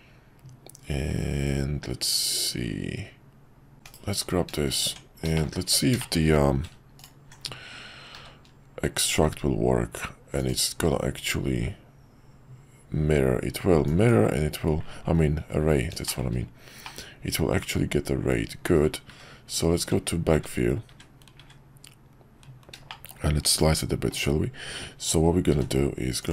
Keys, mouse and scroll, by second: 3.7 /, 3.8 /, 4.8 Tab, 5.3 shift+middle click, 6.0 shift+middle click, 8.1 q, 16.0 shift+middle click, 16.8-18.6 middle drag, 19.8 `, 22.9-23.2 shift+middle drag, 25.5 d.